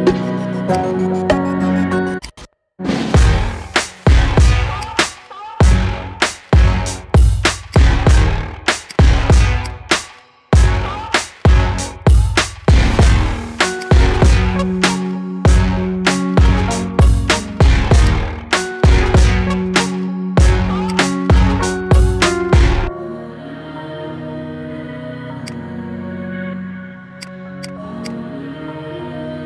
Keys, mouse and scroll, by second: 0.6 click, 2.1-4.6 shift+drag, 4.7-7.2 shift+drag, 7.6-8.8 right drag, 8.8 click, 9.5 click, 10.1-12.6 middle drag, 13.6-15.6 shift+drag, 15.6 KP_1, 16.5 s, 18.4-20.7 middle drag, 20.7-22.3 shift+drag, 22.3-24.4 middle drag, 24.4-24.7 scroll up 3, 24.7-25.3 middle drag, 25.3-27.1 right drag, 27.1 click, 27.5 click, 28.0-29.4 right drag.